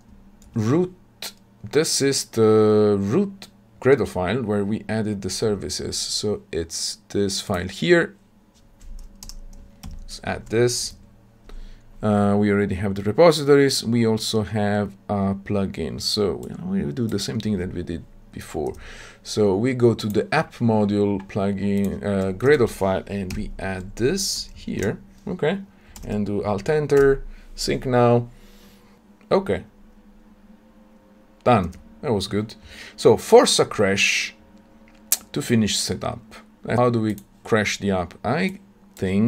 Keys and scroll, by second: 9.7 ctrl+v, 10.3 Delete, 23.2 ctrl+v, 26.7 alt+Return.